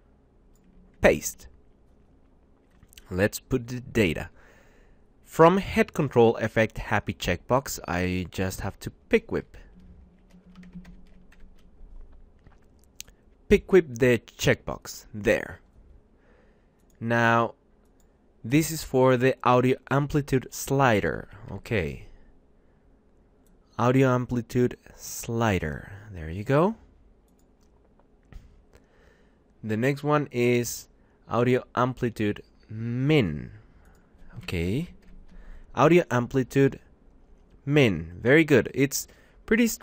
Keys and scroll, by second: 0.9 ctrl+v, 10.0 Right, 11.1 shift+Left, 20.8 ctrl+shift+Right, 21.2 shift+Left, 34.2 ctrl+shift+Right, 34.7 shift+Left.